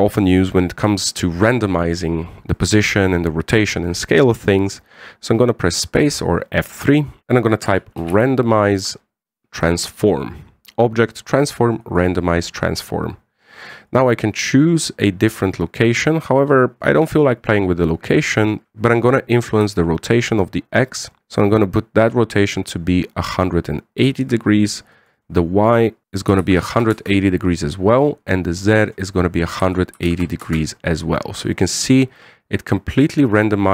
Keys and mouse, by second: 6.6 space, 14.6-17.8 drag, 18.6 ctrl+click, 20.3-24.9 ctrl+drag, 25.7-29.3 drag, 29.5-31.8 drag, 32.9-33.7 middle drag.